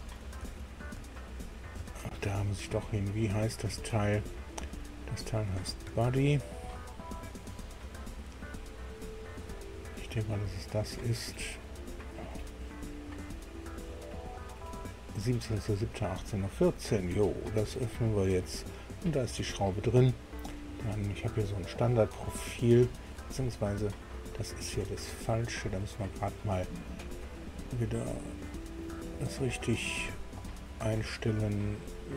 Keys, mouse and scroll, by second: 0.0 alt+Tab, 1.8 Tab, 6.0 alt+Tab, 9.3 click, 11.0-12.4 drag, 13.9 click, 17.6 click, 28.1 click, 29.7 click.